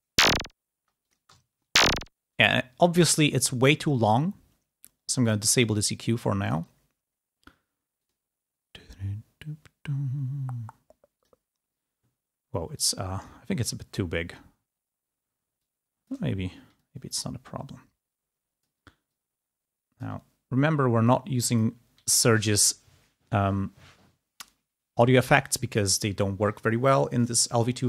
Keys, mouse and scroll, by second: 0.0 space, 1.0 click, 1.3 ctrl+scroll up 1, 2.2 space, 2.8 click, 5.1 click, 6.3 click, 7.9 click, 11.1 click, 12.6 click, 14.5-15.4 scroll down 4, 15.6 click, 16.7-18.7 drag, 19.0-20.0 drag, 20.1-20.4 scroll down 1, 20.6 scroll up 1, 20.9 click.